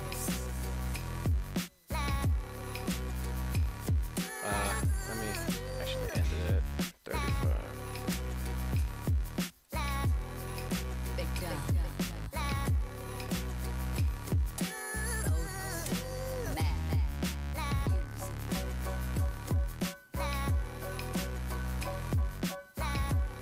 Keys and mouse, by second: 5.5-6.9 drag, 9.5-11.1 drag, 12.1 Tab, 13.8-15.0 drag, 15.8-23.4 drag.